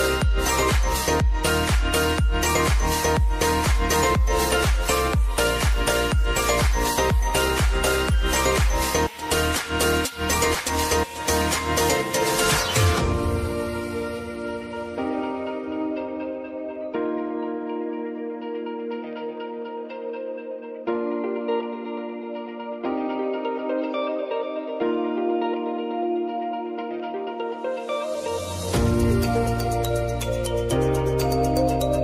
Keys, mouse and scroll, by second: 0.9 `, 1.9-4.5 drag, 4.8 `, 5.9 click, 10.1 space, 12.1 click, 12.7 space, 14.4-15.8 drag, 21.3 click, 21.4-25.7 drag, 25.7 ctrl+z, 26.4-32.0 drag.